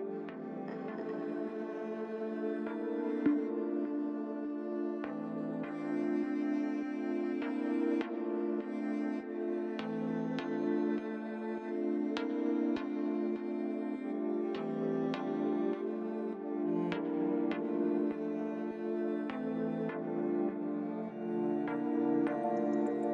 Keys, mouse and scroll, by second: 1.7 click, 2.5 click, 4.0 Tab, 4.6 middle click, 6.5 click, 7.6 Tab, 8.7 click, 9.9 l, 10.9 click, 11.7 click, 12.3 Tab, 12.6-13.2 scroll down 2, 14.0 shift+middle click, 15.2-15.8 scroll up 1, 15.8 click, 16.6 Tab, 16.9 click, 18.1 l, 18.5 middle click, 21.2 l.